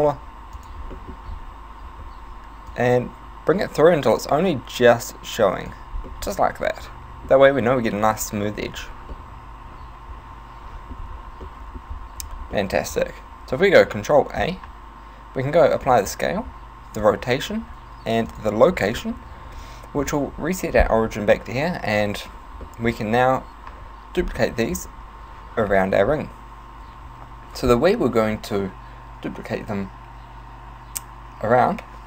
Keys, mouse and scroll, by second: 0.2 s, 0.7 click, 1.0 middle click, 1.3 z, 2.7 click, 6.1 middle click, 9.1 middle click, 11.5 middle click, 12.6 middle click, 14.4 ctrl+a, 16.3 ctrl+a, 17.6 ctrl+a, 19.1 middle click, 22.7 middle click, 24.2 scroll down 4, 24.7 z.